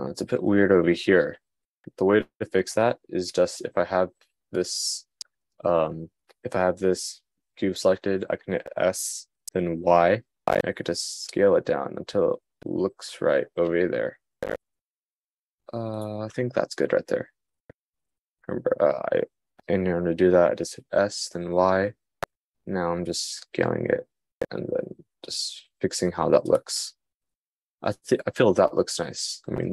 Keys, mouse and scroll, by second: 16.0-20.9 middle drag.